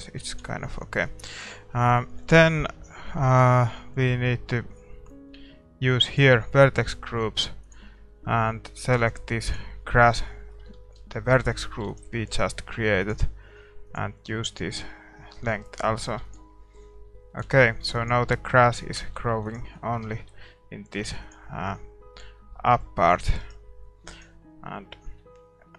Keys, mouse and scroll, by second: 1.0 ctrl+s, 1.3-9.5 right drag, 10.3-13.9 middle drag, 13.9 ctrl+s, 13.9-16.5 drag, 14.3-19.6 middle drag, 16.5 ctrl+s, 16.9 a, 18.3 ctrl+s, 19.7 ctrl+s, 19.7 middle click, 21.8 ctrl+s, 23.4-25.7 middle drag, 23.4-25.7 right drag.